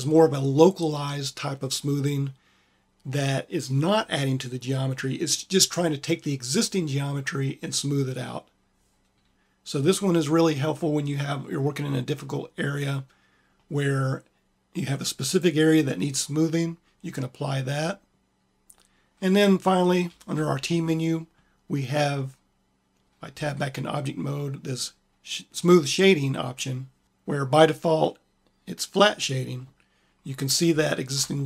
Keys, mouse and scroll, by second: 19.8 t, 23.2 Tab, 28.7 click, 31.0 click.